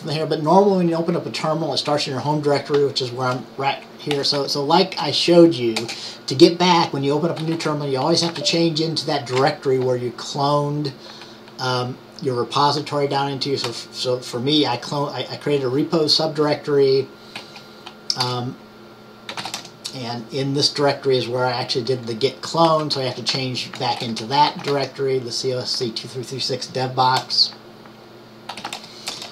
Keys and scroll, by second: 4.0-5.9 typing, 7.3-8.9 typing, 10.6 typing, 17.4-21.7 typing, 22.8-25.1 typing, 27.1-29.3 typing.